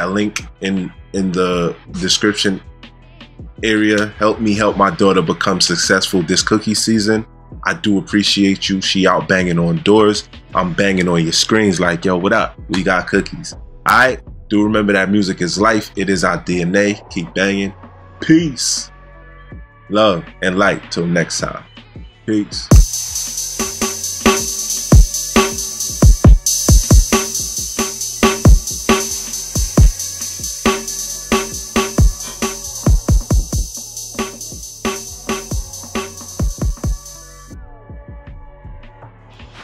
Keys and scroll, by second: 22.6 space.